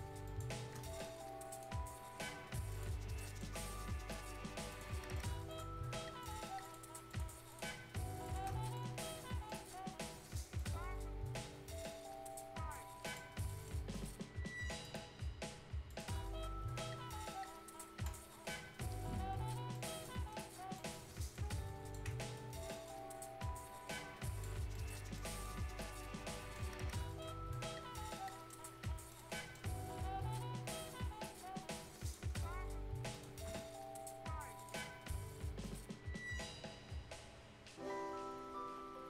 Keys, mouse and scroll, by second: 3.1 right click, 3.6 scroll up 2, 4.7 shift+click, 8.7 right click, 9.1 scroll up 1, 9.4 right click, 10.5-13.0 drag, 13.3 scroll up 1, 13.4 right click, 14.8 click, 19.2 Escape, 19.7 click, 20.4 scroll down 1, 20.7 scroll up 1, 20.7 right click, 21.3 ctrl+click, 22.5 scroll up 1, 22.7 right click, 23.4 click, 24.5-25.1 scroll down 2, 24.7 right click, 25.1 right click, 25.5 Tab, 25.8 scroll up 1, 26.0 right click, 26.4 Tab, 26.7 scroll up 1, 26.9 right click, 27.2 scroll down 1, 27.5 right click, 27.9 scroll down 1, 28.2 right click, 28.6 scroll up 1, 28.8 right click, 29.6 scroll up 1, 35.0-35.7 scroll up 1.